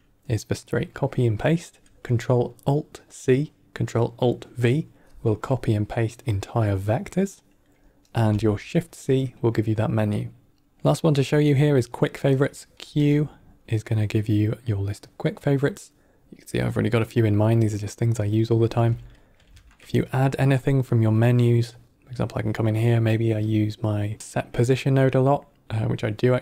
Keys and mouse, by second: 10.7 middle click, 11.3 middle click, 12.3 middle click, 12.8 q, 18.5 click, 18.7 x, 19.0 middle click, 19.4 shift+a.